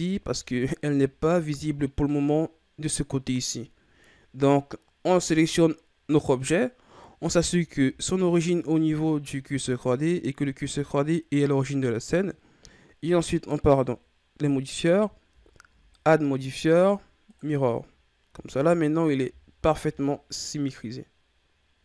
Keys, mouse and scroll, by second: 7.5-10.7 shift+scroll up 2, 13.6 click, 15.9-18.3 drag, 18.3 a, 19.5-20.9 shift+scroll down 2.